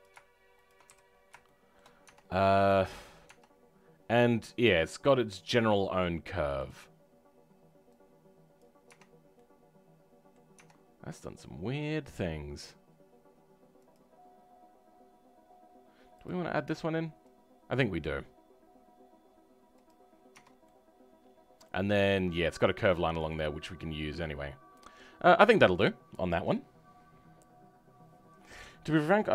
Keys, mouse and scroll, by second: 1.0-1.4 scroll down 3, 1.4 shift+middle click, 2.0 Tab, 2.2 middle click, 3.2 Tab, 5.7 middle click, 6.6-7.9 drag, 8.8 Tab, 8.8 click, 9.3 middle click, 10.5 Tab, 10.7-13.7 scroll up 3, 13.7-16.2 drag, 20.0 scroll down 3, 20.2 Tab, 20.6-22.9 middle drag, 22.9 scroll down 4, 23.2-29.3 middle drag.